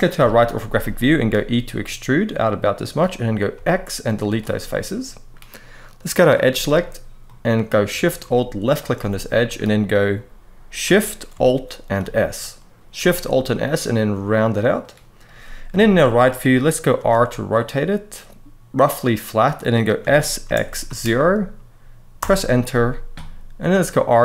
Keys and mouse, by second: 0.7 shift+middle click, 1.1 e, 3.3 x, 4.4 middle click, 5.9 click, 6.2 middle click, 7.0 middle click, 8.4 alt+shift+click, 8.9 middle click, 11.8 alt+shift+s, 12.2 alt+shift+s, 12.7 alt+shift+s, 14.5 click, 15.4 KP_3, 16.7 r, 19.2 click, 19.7 s, 20.2 z, 20.6 0, 21.9 Return, 23.3 r.